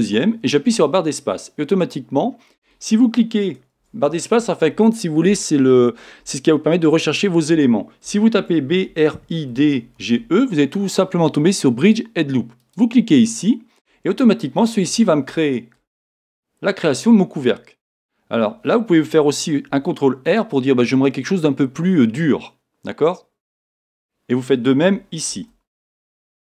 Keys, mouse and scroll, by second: 4.7 space, 15.5-23.8 middle drag, 17.8-19.7 scroll up 1, 19.7 ctrl+r, 23.8 click, 25.3 ctrl+r.